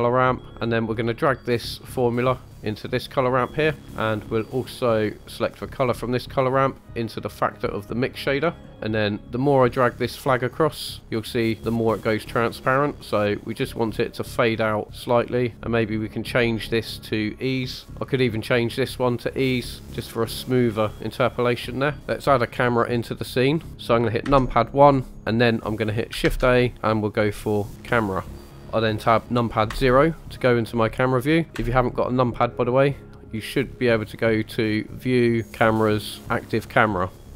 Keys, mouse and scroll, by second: 0.9-2.0 scroll up 2, 2.0-3.9 drag, 3.9 middle click, 5.1-8.7 drag, 8.7-9.4 scroll up 1, 10.1-15.8 drag, 16.0 click, 16.4-17.9 drag, 18.4-19.5 drag, 21.9 scroll down 1, 22.0 KP_0, 22.8 click, 23.6 click, 24.2 KP_1, 26.2 shift+a, 28.6 shift+middle click, 29.7 KP_0, 31.5 KP_0, 33.3-34.7 scroll up 1, 34.9-37.2 drag.